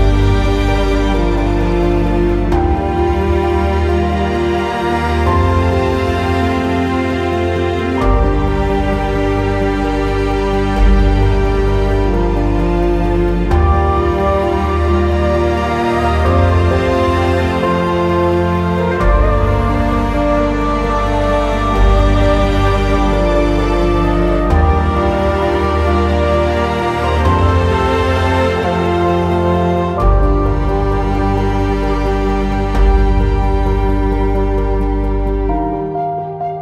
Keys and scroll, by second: 19.9 ctrl+a.